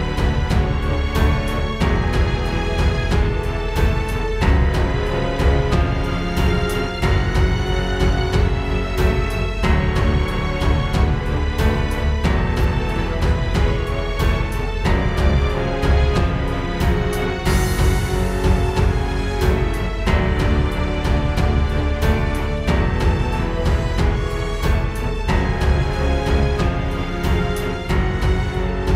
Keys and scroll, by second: 6.9 super+g, 9.8 super+z, 17.4 space, 18.0 super+space, 20.4 super+g, 26.4 super+], 28.0 space, 28.6 space.